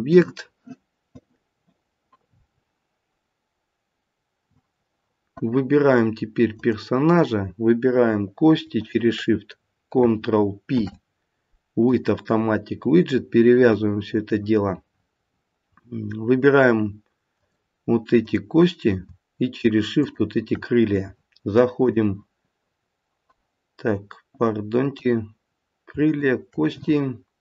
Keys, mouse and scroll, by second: 6.5 click, 8.8 shift+click, 10.6 ctrl+p, 17.3 click, 18.1 click, 19.9 shift+click, 20.4 shift+click, 21.8 click, 26.1 click.